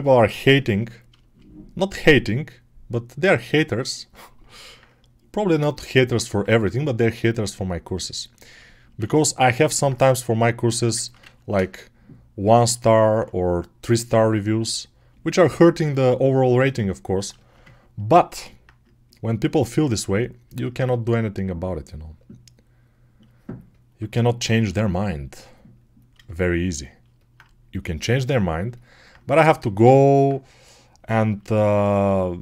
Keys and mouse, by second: 0.7 alt+middle click, 1.0 alt+shift+right click, 1.1 alt+shift+middle click, 1.2 alt+shift+right click, 1.2-23.1 alt+drag, 23.1 alt+right click, 23.2 alt+click, 23.3 alt+right click, 23.5 alt+middle click, 23.6 alt+click, 23.8-29.9 alt+right drag, 29.9-32.4 alt+drag.